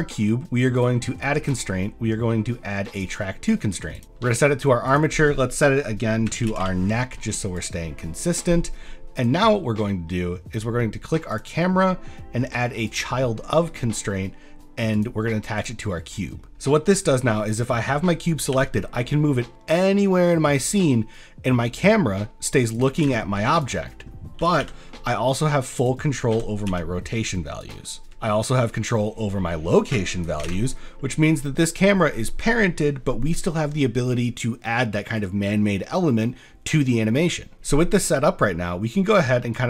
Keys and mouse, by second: 0.8 click, 1.4-3.0 drag, 4.0 click, 4.0 middle click, 4.9-7.7 drag, 8.2 middle drag, 8.6 middle drag, 9.2 click, 10.2 middle click, 11.4-13.0 drag, 13.6 middle click, 13.9 shift+middle click, 14.9 click, 18.5 g, 23.1 ctrl+z, 23.5 click, 24.4 r, 24.6 y, 26.3 r, 26.7 x, 27.6 click, 28.0 ctrl+shift+z, 30.5 ctrl+z, 30.9 middle drag, 38.2 middle click, 38.7-39.1 middle drag, 39.5 click.